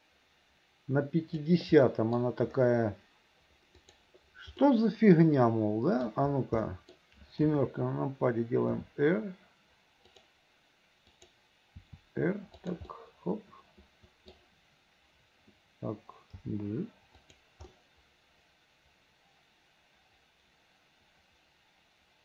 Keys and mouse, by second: 1.9 middle click, 4.0 right click, 4.7-6.1 middle drag, 6.7 middle click, 7.6 KP_7, 8.9 r, 11.3 click, 13.1-14.5 middle drag, 16.4 g, 17.9-22.2 middle drag.